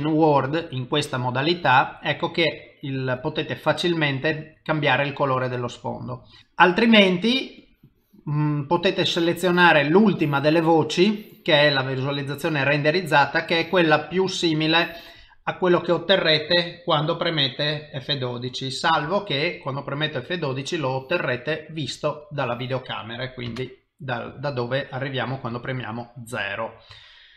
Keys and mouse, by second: 0.1 middle click, 1.9 middle click, 3.2 click, 6.1 middle click, 6.4 click, 11.5 middle click, 13.3 click, 15.3 middle click, 25.6 ctrl+middle click.